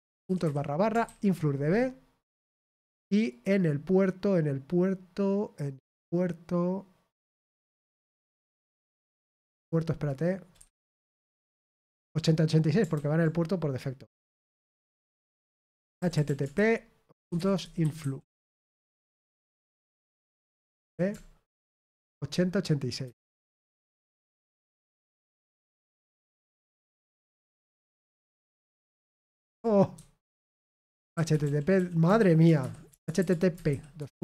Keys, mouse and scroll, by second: 3.2 click, 8.6 click, 9.6 click, 15.8-18.4 typing, 26.9-27.9 typing, 28.7 ctrl+v, 32.8 typing.